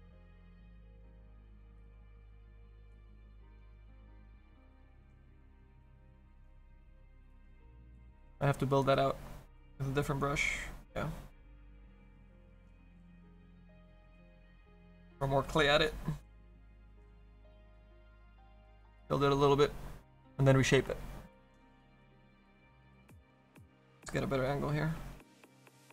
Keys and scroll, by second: 3.4 s, 13.1-17.0 typing.